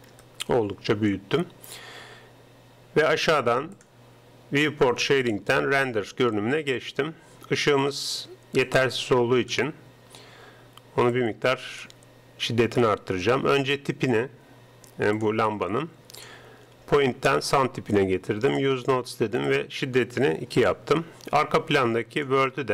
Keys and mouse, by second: 0.3-2.8 middle drag, 3.7-5.7 drag, 8.7-11.0 drag, 11.2-12.8 drag, 15.2-21.2 drag, 22.2-22.7 drag.